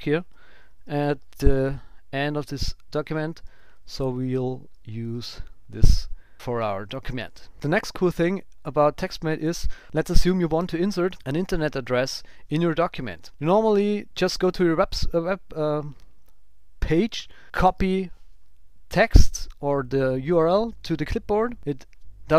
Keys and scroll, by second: 0.3 shift+super+Down, 0.7 super+x, 3.4 super+Left, 3.6 shift+Down, 5.0 super+v, 8.2 super+Down, 8.6 Up, 9.6 shift+super+Right, 14.8 alt+shift+Left, 17.6 super+c.